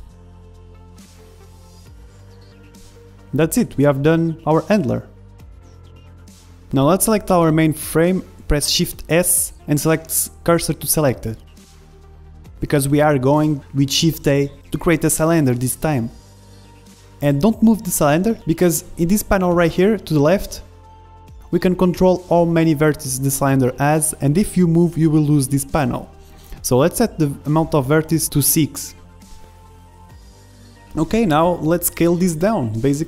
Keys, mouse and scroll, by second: 0.0-0.6 typing, 3.1 click, 3.5 Tab, 4.0-6.0 middle drag, 6.3 z, 8.0 n, 8.8 middle click, 9.3-12.3 drag, 9.7 shift+s, 11.7 middle click, 12.1 middle click, 13.0-14.9 middle drag, 13.7 KP_1, 13.8 shift+a, 21.6-23.5 drag, 24.2-26.4 drag, 26.7-30.7 drag, 30.7 ctrl+z, 30.7 w, 30.7 KP_1, 31.1-32.4 middle drag, 32.4 click, 32.4 s.